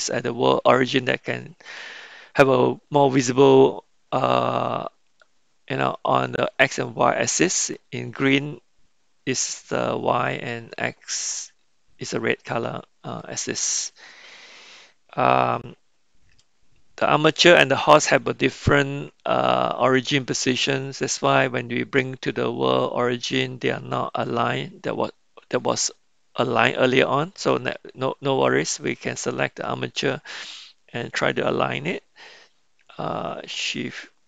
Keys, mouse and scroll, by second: 5.9-7.5 middle drag, 13.3-14.0 middle drag, 17.3 click.